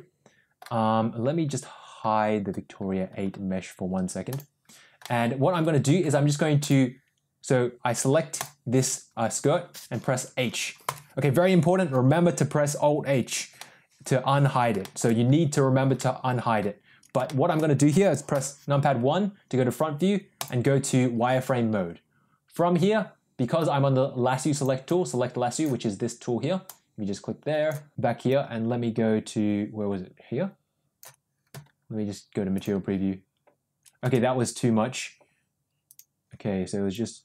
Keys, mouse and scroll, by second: 4.2 click, 4.9 middle click, 6.5 click, 8.2 click, 10.8 h, 13.5 middle click, 14.7 shift+middle click, 15.8 middle click, 17.1 shift+middle click, 18.2 KP_1, 20.3 click, 23.4-24.6 drag, 24.8-25.5 drag, 26.5-27.6 drag, 28.2-30.9 drag, 32.5 click, 35.8 click, 36.8-37.2 ctrl+drag.